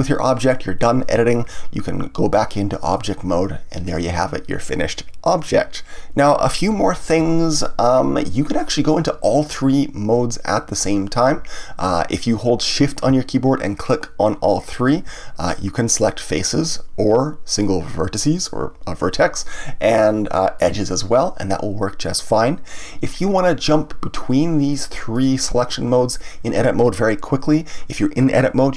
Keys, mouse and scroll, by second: 2.3-5.3 drag, 7.1 Tab, 13.8 shift+click, 14.8 shift+click, 15.9 click, 17.5 click, 20.5 click, 24.7 click, 25.1 click, 25.6 click.